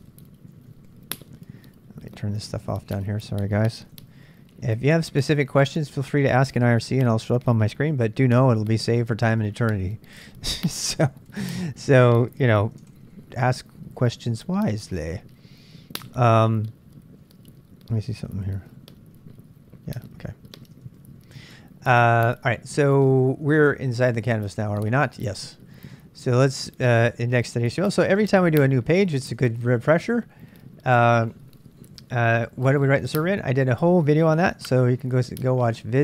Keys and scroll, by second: 0.0-2.9 typing, 3.7 ctrl+b, 4.0 ctrl+j, 4.1 ctrl+j, 5.3-7.0 typing, 10.6 ctrl+b, 11.0 ctrl+j, 11.3 ctrl+j, 12.6 ctrl+b, 12.9 ctrl+j, 13.0 ctrl+j, 13.9 BackSpace, 14.1 BackSpace, 14.2 BackSpace, 18.2 ctrl+b, 18.6 q, 20.5 ctrl+b, 20.8 ctrl+k, 20.9 ctrl+k, 22.0-29.8 typing, 34.6-35.4 typing.